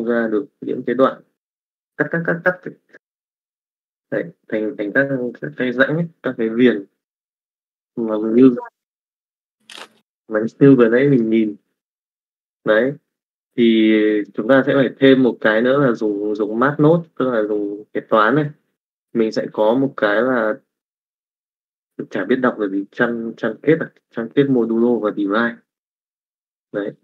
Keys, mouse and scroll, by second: 9.8 middle click, 10.8 middle click, 12.2 middle click, 12.9 middle click, 14.9 middle click, 15.5 click, 16.5 click, 17.8 click, 18.3 middle click, 19.1 middle click, 20.1 click, 21.0-23.8 drag, 24.6 click, 25.6-26.8 drag.